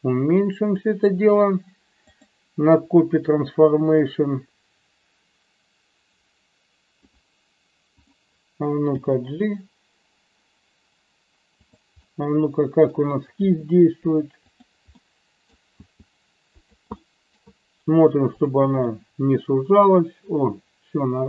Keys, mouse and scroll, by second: 2.1 click, 4.0-7.1 drag, 9.0 g, 11.6 click, 12.0-13.0 middle drag, 13.4 r, 14.6 click, 15.0-15.6 middle drag, 15.8 r, 16.4 click, 17.0 middle click, 18.3 click, 19.0-21.2 middle drag.